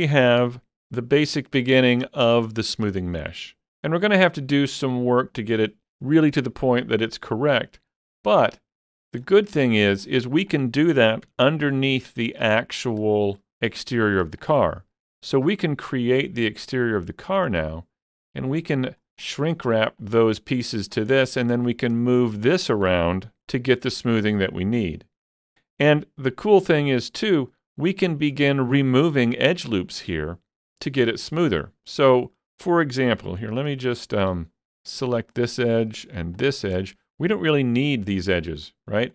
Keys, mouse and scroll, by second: 0.4 Tab, 8.1 scroll up 1, 8.2 scroll down 3, 8.5 shift+middle click, 9.2 scroll down 2, 10.0-10.5 scroll up 2, 10.5 click, 11.3 Tab, 11.7-12.1 scroll up 2, 12.4 middle click, 12.8 scroll up 3, 14.0 click, 14.4 shift+click, 14.7 shift+click, 16.0-17.9 shift+drag, 18.5 click, 19.9-21.1 drag, 20.8 scroll down 2, 21.1 middle click, 21.8 shift+middle click, 22.7 ctrl+s, 22.9 Tab, 23.1-24.0 scroll down 3, 24.0-25.4 middle drag, 24.8-25.4 scroll up 2, 25.4-26.3 scroll up 2, 26.3 middle click, 26.8 Tab, 27.5 middle click, 28.2-33.5 shift+middle drag, 33.2 ctrl+s, 34.0 shift+middle click, 35.2 alt+click, 36.9-39.1 shift+middle drag.